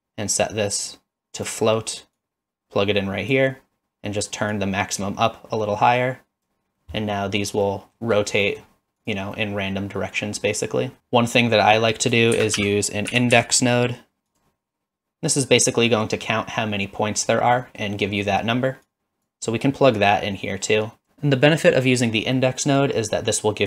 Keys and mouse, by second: 2.2-3.4 drag, 4.5-6.5 drag, 6.8-7.4 middle drag, 7.6-8.0 middle drag, 8.4 middle click, 9.4-10.4 middle drag, 12.4 shift+a, 17.6 middle click, 18.9-19.3 drag, 20.0-22.0 drag, 22.4-22.8 middle drag.